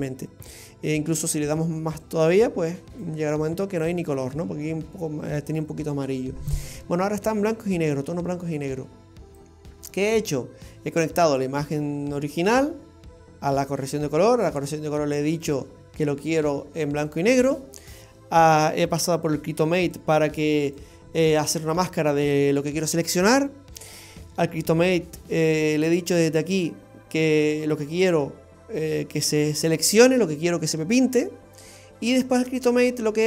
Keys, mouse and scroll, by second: 2.1 click, 8.1-9.1 scroll up 2, 9.4 click, 20.0 click, 24.6-25.1 scroll down 2, 26.5 click, 32.6 click.